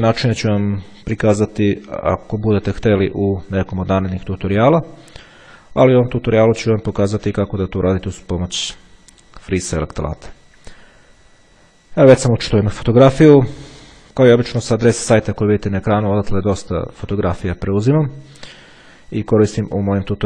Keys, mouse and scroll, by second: 13.7-14.1 ctrl+scroll up 2.